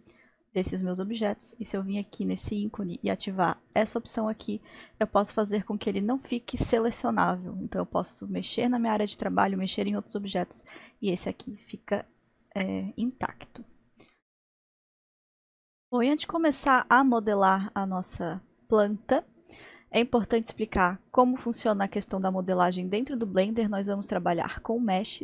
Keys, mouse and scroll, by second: 2.1-7.0 drag, 7.2 click, 8.7-9.4 drag, 13.0-14.1 drag, 14.1-18.7 middle drag, 24.0-25.2 drag.